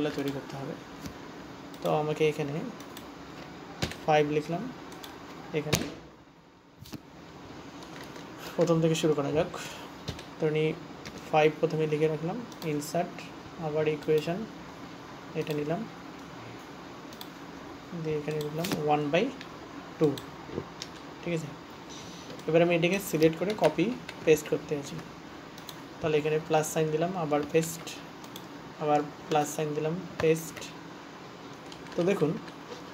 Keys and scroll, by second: 28.1 ctrl+v, 30.8 ctrl+v.